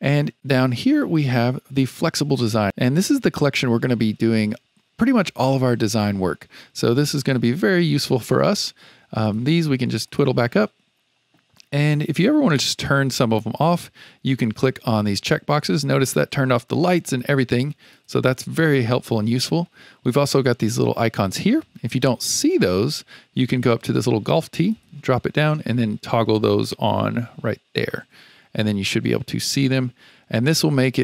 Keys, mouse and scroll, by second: 1.0 click, 2.6 click, 9.2 click, 10.0 click, 12.7 click, 13.4 click, 17.0 click, 17.9 click, 24.7-27.8 drag.